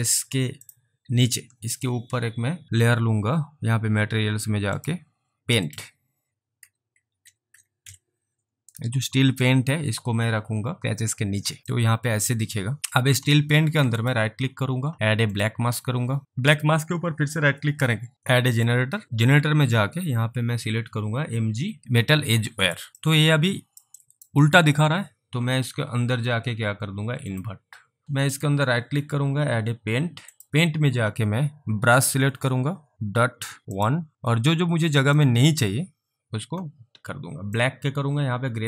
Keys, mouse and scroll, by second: 4.1 scroll down 1, 4.8 click, 6.4-8.3 typing, 9.4 typing, 9.5 click, 11.8 alt+click, 14.0 right click, 15.4 click, 16.6 right click, 18.6 click, 22.7 click, 23.1 alt+click, 24.1 alt+right click, 24.6 alt+click, 27.3 click, 28.0 alt+right click, 28.0 alt+double click, 28.4 right click, 30.4 click, 32.9 click, 33.3 scroll down 1, 33.7 scroll, 33.8 click, 37.6 click.